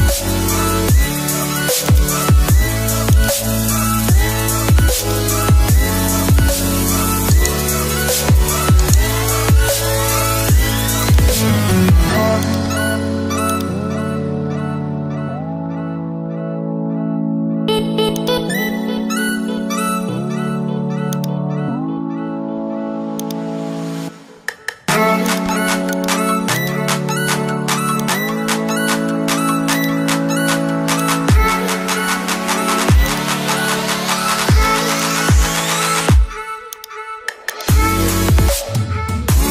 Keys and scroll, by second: 8.3 Return, 16.6 Return.